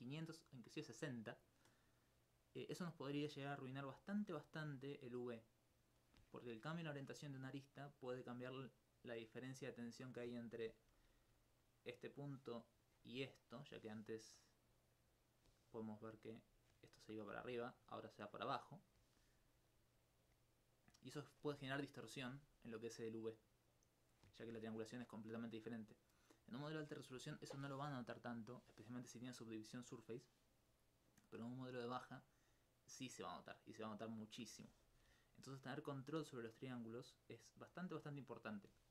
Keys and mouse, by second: 10.9 d, 11.3 click, 12.3 click, 14.4 click, 16.3-16.9 d, 17.1 click, 18.2 click, 19.7-21.5 drag, 32.1-34.0 middle drag, 35.1 d, 35.6 right click.